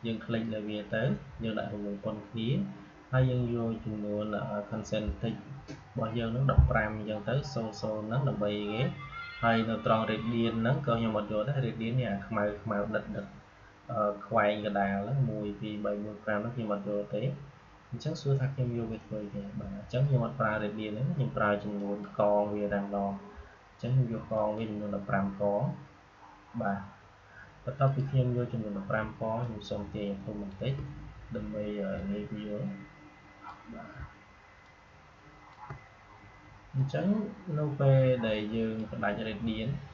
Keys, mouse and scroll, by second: 21.7 click, 24.2 click, 27.8 click, 29.3-34.5 shift+drag, 34.5-39.9 shift+drag.